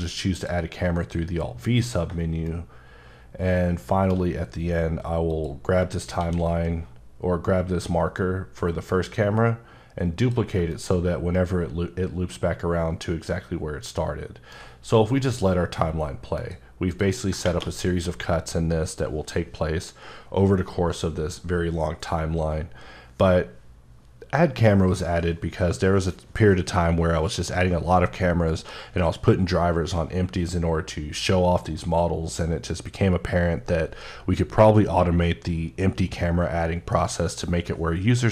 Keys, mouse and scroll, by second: 0.0 click, 1.1-1.5 scroll down 1, 2.4 shift+right click, 5.3 click, 6.2 shift+d, 10.2 click, 10.6 shift+click, 10.7 shift+right click, 16.4 click, 17.4 space.